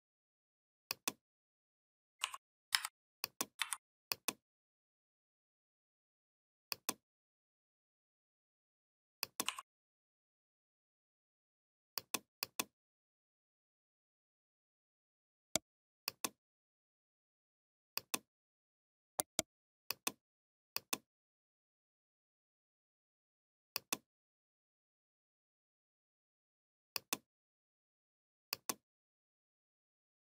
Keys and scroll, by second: 2.6 a, 3.4 v.